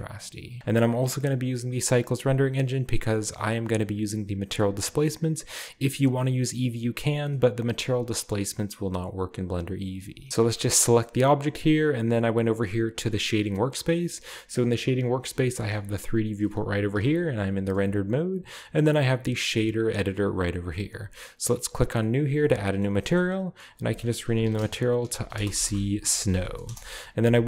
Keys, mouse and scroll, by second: 0.2 click, 0.5-1.3 scroll up 2, 1.3-2.2 drag, 10.2 ctrl+b, 10.2-11.4 drag, 13.2-14.3 drag, 14.4-16.1 drag, 17.0-17.7 typing, 19.1-20.1 drag, 21.9 click, 22.9 middle click, 22.9-23.7 scroll down 2, 23.7 click, 24.5-27.2 typing.